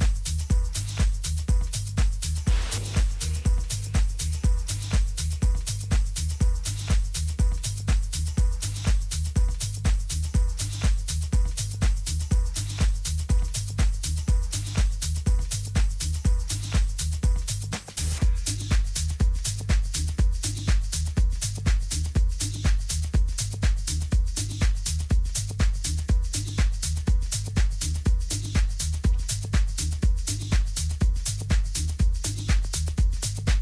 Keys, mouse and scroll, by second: 8.0-12.7 middle drag, 18.8-24.3 middle drag, 21.6 z, 28.7-30.4 right drag, 30.4 click, 30.4-32.3 middle drag, 32.9-33.6 middle drag, 33.3 Tab.